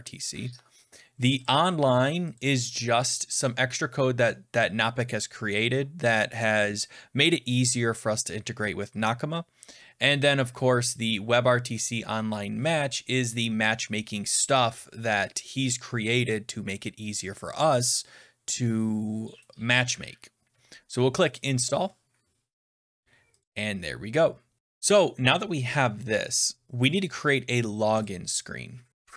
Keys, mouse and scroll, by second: 1.4 click, 2.3 click, 2.9 scroll up 5, 21.4 click, 23.3 click, 27.9 click, 28.9 click.